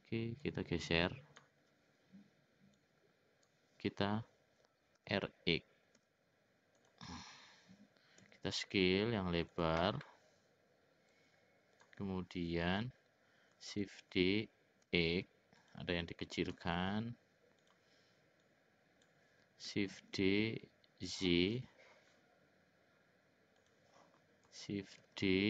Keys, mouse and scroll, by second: 0.4-1.4 drag, 2.8 click, 5.0 r, 8.3 s, 11.1 click, 13.8 shift+d, 16.5 s, 18.4 click, 20.0 shift+d, 25.0 shift+d.